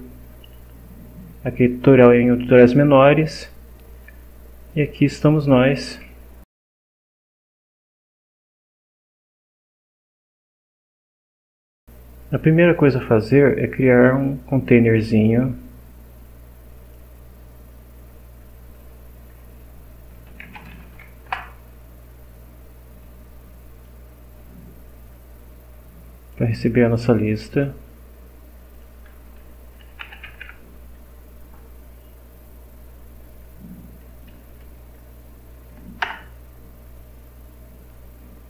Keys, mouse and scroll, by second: 3.9 click, 4.7 click, 16.8 click, 20.1-21.2 typing, 21.2 Return, 23.0-24.0 drag, 24.4-26.5 drag, 26.6-27.8 drag, 28.8 click, 29.6-30.9 typing, 33.3 Down, 34.3 Down, 36.0 Return, 37.9-38.4 drag.